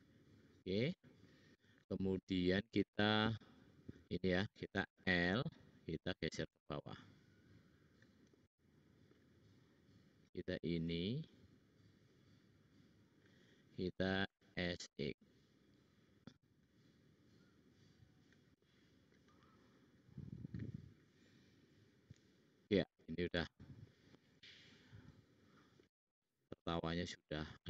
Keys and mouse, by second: 5.0 l, 14.1 s, 15.5-16.5 drag, 17.4-18.8 drag, 17.4-19.9 middle drag, 17.4-18.8 right drag, 22.3-25.7 middle drag, 27.1-27.6 middle drag.